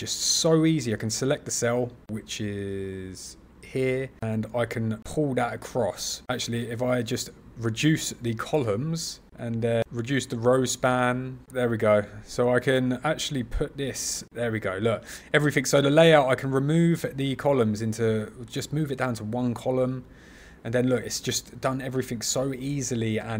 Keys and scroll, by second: 11.4 super+z.